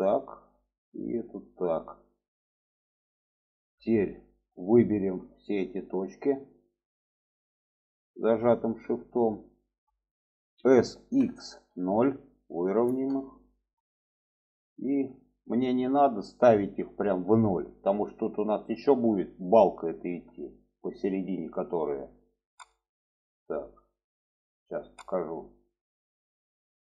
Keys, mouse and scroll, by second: 0.6 click, 1.3-2.8 drag, 3.5 shift+middle click, 4.8 shift+middle click, 5.8-6.7 drag, 7.4-8.3 shift+drag, 8.6 shift+middle click, 9.4-9.7 shift+middle drag, 10.5 s, 14.8 shift+middle click, 20.5 shift+middle click.